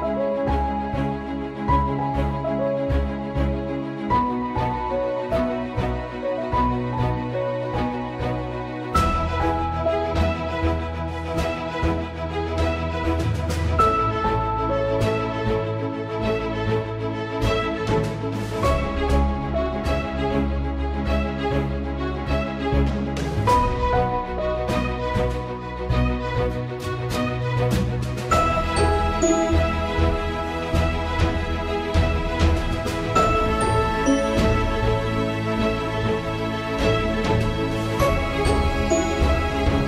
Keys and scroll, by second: 1.5 ctrl+a, 2.0 Return, 5.8 Caps_Lock, 19.3 Up, 19.5 Down, 19.7 Up, 20.0 Down, 20.3 Return.